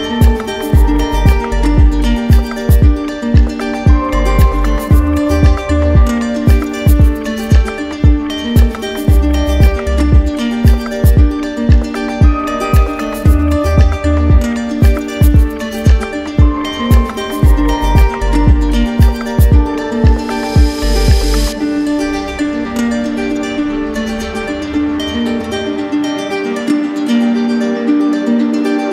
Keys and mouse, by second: 2.3 z, 3.3 click, 5.9 right click, 7.8 click, 10.8 click, 11.7 click, 13.9 click, 18.0 click, 18.7 click, 20.0 click, 21.2 alt+right click, 24.8 right click, 27.2 alt+right click.